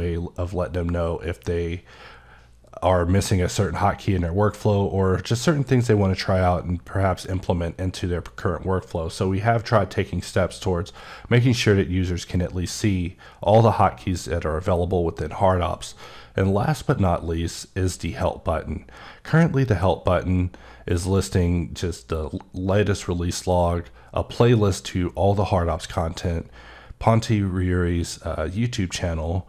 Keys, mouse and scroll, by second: 16.6 click.